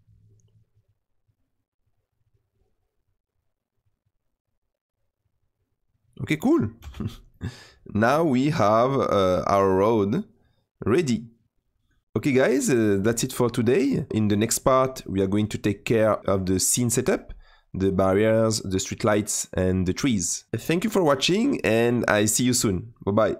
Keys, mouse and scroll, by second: 7.2-8.9 middle drag, 8.9 click, 9.3-21.0 middle drag, 22.9 middle click.